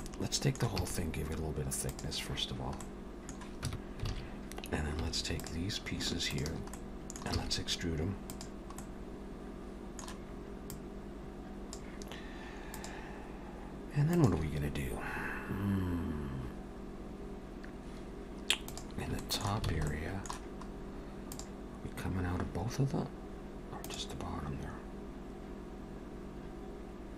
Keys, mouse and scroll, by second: 0.0 middle click, 0.8 e, 2.8 middle click, 3.7 Tab, 4.1 alt+a, 5.0 3, 5.4 click, 6.3 shift+click, 6.7 middle click, 7.4 e, 8.8 middle click, 10.7 click, 19.2 shift+middle click, 19.7 alt+a, 19.9 middle click, 20.7 scroll up 2, 21.3 click.